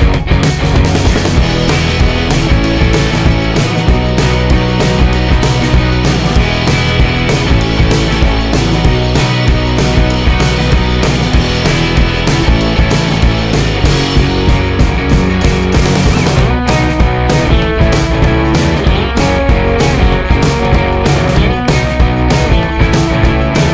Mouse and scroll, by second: 0.9 click, 1.5 click, 3.5 click, 4.7 click, 6.4 click, 6.9 click, 10.0 click, 11.7-12.8 drag, 14.3-16.6 drag, 17.2 click, 19.7 click, 20.4 click, 21.8-23.5 drag.